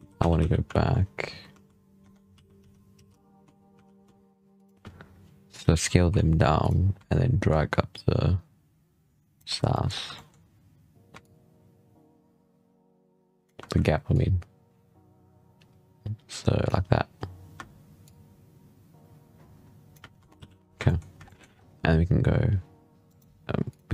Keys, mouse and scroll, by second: 1.3 ctrl+z, 1.9 Tab, 2.2 a, 2.4 s, 5.6 s, 7.3-9.4 shift+drag, 9.4 scroll down 2, 9.6-11.1 shift+middle drag, 11.1-17.0 shift+drag, 17.9-20.0 shift+drag, 20.0 Tab, 20.2 z, 20.4 scroll down 5, 20.7 shift+middle drag, 21.0-21.6 scroll up 4, 21.1 shift+middle drag, 22.9 right click, 23.5 click.